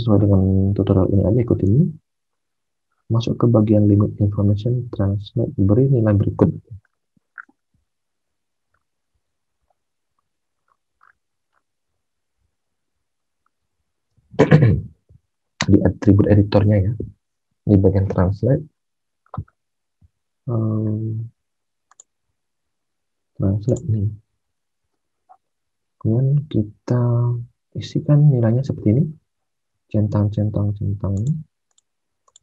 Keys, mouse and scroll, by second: 18.7 alt+Tab, 24.5 alt+Tab, 29.5 alt+Tab.